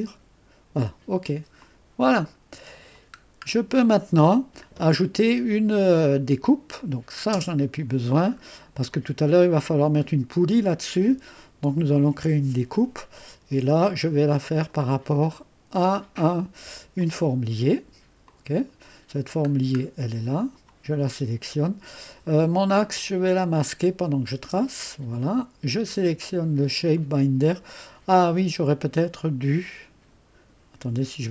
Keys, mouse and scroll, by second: 0.0-0.7 scroll up 2, 0.7-1.6 scroll up 1, 1.6 click, 3.2-3.9 scroll down 2, 3.9-5.0 drag, 6.8 click, 7.3 space, 8.9-11.3 middle drag, 14.4 click, 17.0 click, 18.2 click, 19.5-20.4 scroll down 1, 20.4 click, 23.2 click, 24.4 space, 26.9 click.